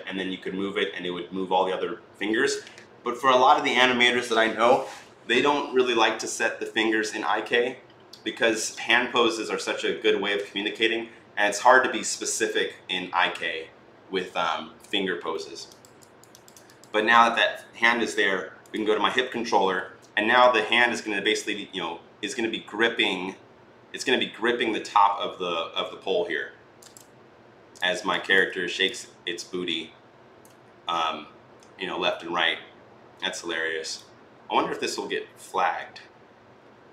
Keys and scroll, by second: 19.4 e.